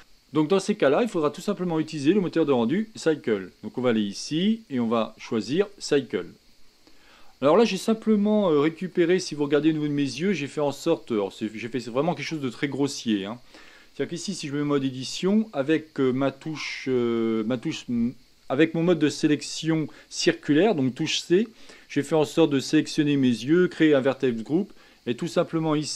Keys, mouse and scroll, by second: 0.0 ctrl+space, 5.8-8.4 drag, 8.4-9.1 shift+middle drag, 9.1-9.5 scroll up 5, 10.2-11.9 shift+middle drag, 11.9-12.6 scroll down 2, 12.8-15.3 shift+middle drag, 15.3 Tab.